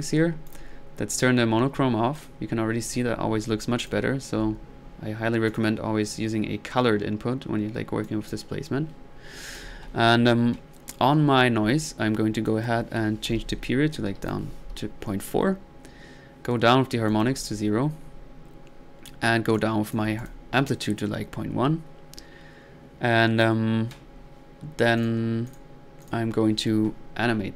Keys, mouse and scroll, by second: 0.5 click, 2.2 click, 3.8 click, 5.5 click, 6.4 middle click, 8.0 click, 12.5 drag, 17.1-17.7 drag, 19.5 click, 24.7-26.2 scroll down 1, 26.2-27.2 scroll down 1.